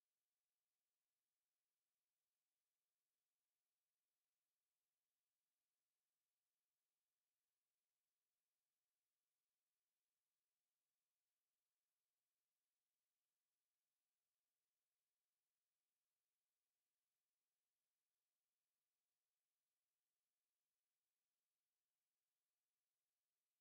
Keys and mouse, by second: 0.7 ctrl+z, 6.2 ctrl+click, 6.9 ctrl+click, 11.2 click, 17.7 shift+click, 19.5 shift+click, 21.6 shift+right click.